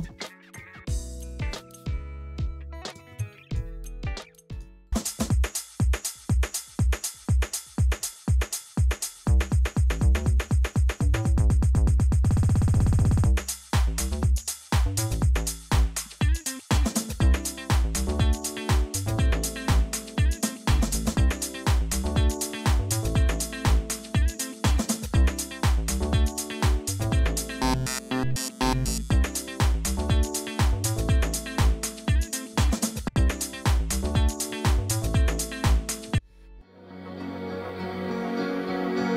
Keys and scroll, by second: 4.9 space, 32.9 space, 36.0 space.